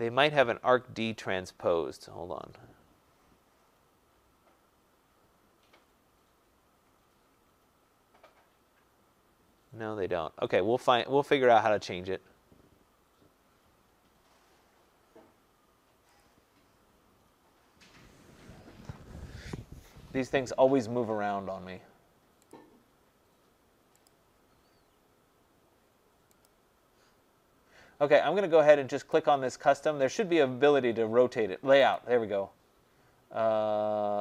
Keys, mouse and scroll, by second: 1.0-1.7 scroll, 1.7 scroll, 2.5-3.1 scroll, 3.1-4.2 scroll, 4.3-8.0 scroll, 8.0-8.5 scroll, 8.5-9.7 scroll, 10.5 click, 11.6 click, 16.2 click, 22.5 click, 24.1 click, 26.5 click, 29.2 click, 32.0 click.